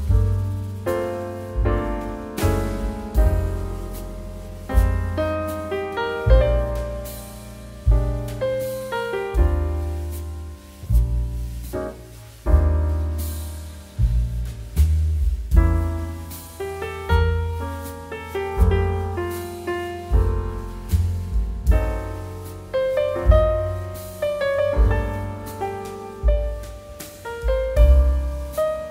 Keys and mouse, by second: 4.8 middle click, 5.2 click, 5.7 middle click, 7.0 Tab, 7.5 Caps_Lock, 7.7 Tab, 8.5 shift+a, 9.1 click, 14.0 click, 14.4 middle click, 15.0 shift+middle click, 15.2 middle click, 15.4 shift+middle click, 15.8 shift+middle click, 16.5 click, 23.7 click, 26.5 middle click, 27.4 g, 27.7 click.